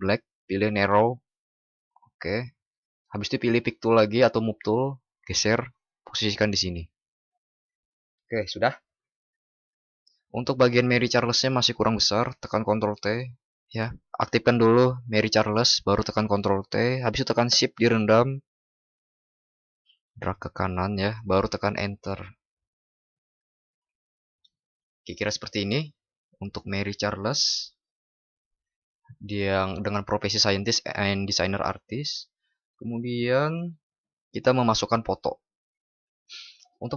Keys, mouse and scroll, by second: 12.6 ctrl+t.